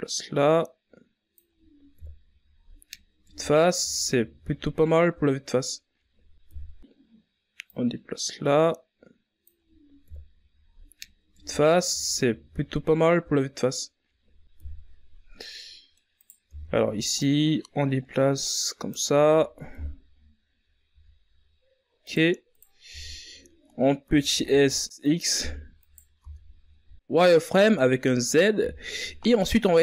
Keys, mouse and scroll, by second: 0.1-4.4 drag, 4.4 KP_1, 5.7 Tab, 6.0 scroll down 2, 6.3 a, 6.8-7.2 scroll up 4, 7.2 scroll down 1, 7.4-8.0 middle drag, 8.0-8.9 scroll up 2, 8.9 KP_1, 10.0-10.6 middle drag, 10.6 right click, 10.9 Tab, 11.6-13.5 drag, 13.5 Tab, 14.1 KP_1, 15.3 a, 16.4 right click, 16.9 right click, 17.3 Tab, 18.4 s, 19.8 Tab, 20.2 right click, 20.6 Tab, 21.9 z, 24.2 e, 28.4 click, 29.3 s.